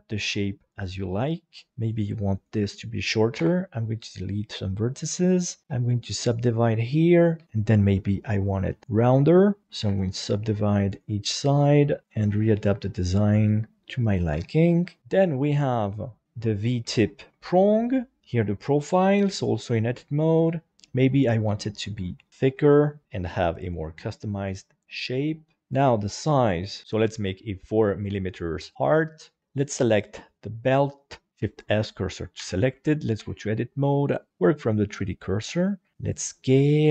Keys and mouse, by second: 1.2 right click, 2.4 shift+right click, 3.4 Delete, 5.0 right click, 5.4 shift+right click, 5.6 w, 6.8 right click, 7.4 g, 7.7 g, 8.6 click, 9.1 g, 9.4 click, 9.9 w, 10.9 right click, 11.7 right click, 11.9 g, 12.0 g, 12.3 g, 13.0 click, 14.4 Tab, 14.9 shift+middle click, 15.6 right click, 16.9 shift+middle click, 18.2 Tab, 19.1 shift+middle click, 21.6 g, 22.5 r, 23.0 s, 23.0 y, 23.4 click, 24.5 Tab, 25.3 shift+middle click, 25.6 right click, 26.2 middle click, 27.8 shift+middle click, 29.1 click, 29.5 right click, 31.3 shift+s, 32.4 Tab, 33.2 a, 34.0 click, 35.5 s, 36.7 click.